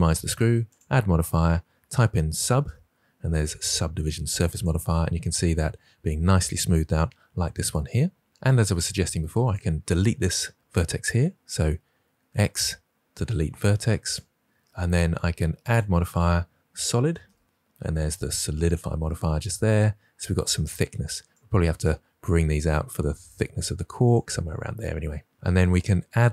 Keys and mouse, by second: 0.7 click, 8.3 Tab, 9.4 click, 12.2 x, 15.5-18.6 drag, 22.1 g, 23.9 click, 25.3 Tab.